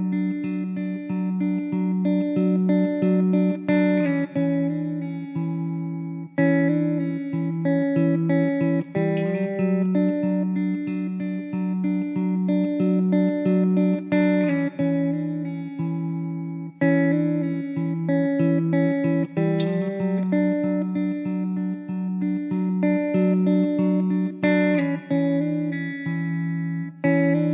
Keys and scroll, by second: 4.6 shift+a, 7.2 `, 8.4 s, 10.8 s, 12.4 `, 14.0 s, 19.9 s, 21.3 `, 26.3 Tab, 27.0 3.